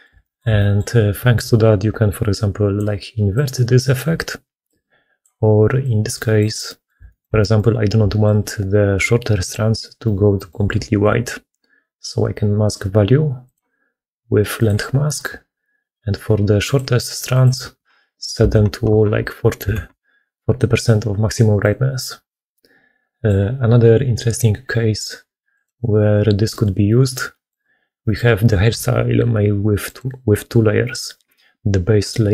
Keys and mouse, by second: 0.1 shift+click, 16.5-19.6 drag, 21.9-27.1 middle drag.